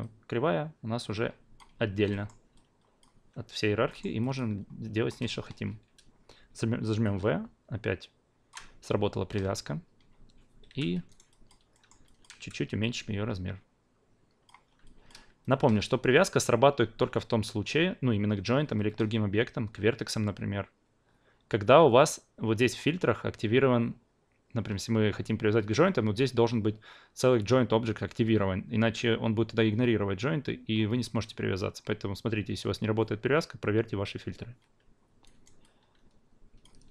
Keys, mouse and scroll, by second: 0.0-1.6 drag, 2.1 alt+middle click, 2.5 alt+click, 4.0 alt+middle drag, 4.3-10.7 alt+drag, 7.0 v, 10.7 f, 11.1 alt+right drag, 11.3 alt+drag, 11.7 alt+middle drag, 12.0 alt+drag, 12.4 r, 12.8-14.4 drag, 14.8 alt+drag, 35.2 alt+right drag, 35.6-36.9 alt+drag.